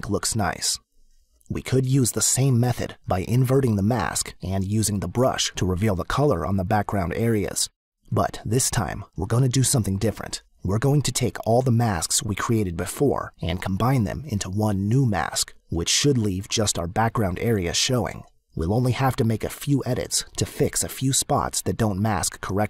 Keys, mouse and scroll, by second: 0.4 click.